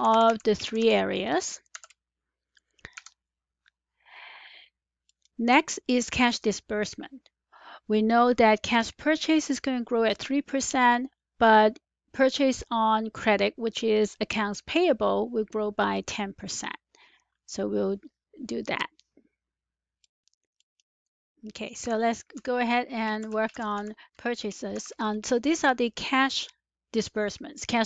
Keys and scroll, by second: 0.0-2.1 typing, 2.8 Return, 7.6 Return, 21.7 typing, 22.3 Left, 22.8-24.7 typing.